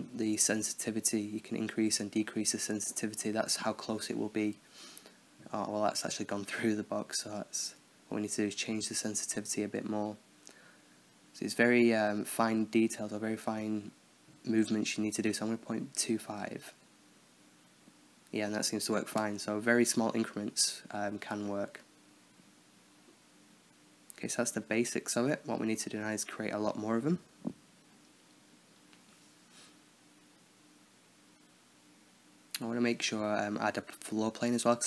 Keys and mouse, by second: 0.1-1.4 drag, 2.3-4.0 middle drag, 4.0 alt+a, 4.0-6.1 drag, 6.5-9.2 drag, 10.4-14.3 drag, 16.8 alt+a, 20.2-21.8 drag, 21.8-22.3 middle drag, 22.3-22.9 drag, 26.3-27.7 drag, 27.7 middle click, 28.2 shift+a, 29.7 space, 31.3 shift+a, 32.8 s.